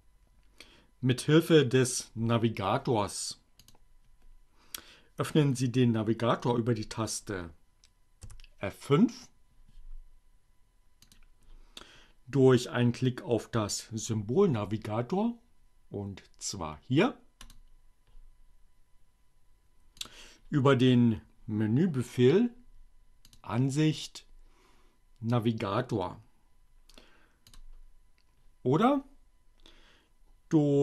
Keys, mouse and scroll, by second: 3.4 click, 5.9 F5, 11.0 click, 16.8 click, 19.0 click, 23.2 click, 26.4 click, 29.6 click.